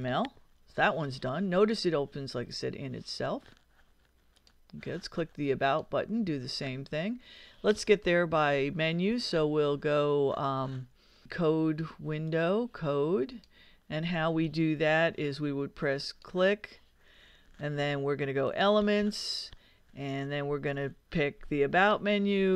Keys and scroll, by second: 0.0-0.5 typing.